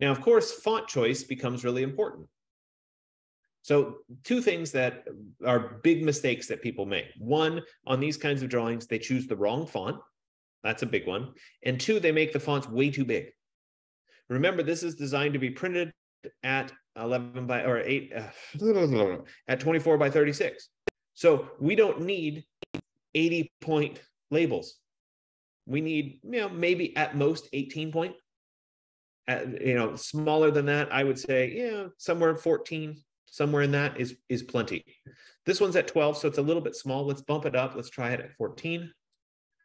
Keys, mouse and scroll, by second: 0.4 typing, 32.9 F15, 36.9 click, 38.5 click.